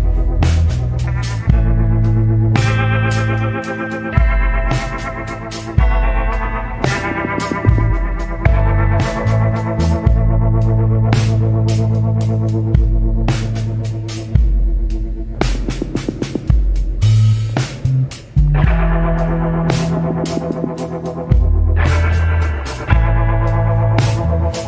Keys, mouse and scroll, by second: 0.0 scroll up 1, 3.7 scroll down 1, 4.9 scroll up 1, 22.6 scroll down 1, 24.4 scroll up 1.